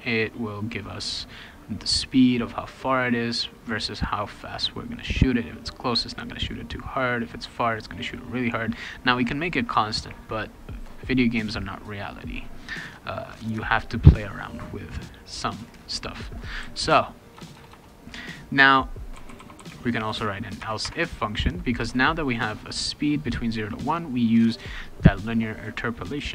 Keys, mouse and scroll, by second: 15.5 click, 16.4-17.7 typing, 18.9-20.6 typing, 20.8 Tab, 21.8 BackSpace.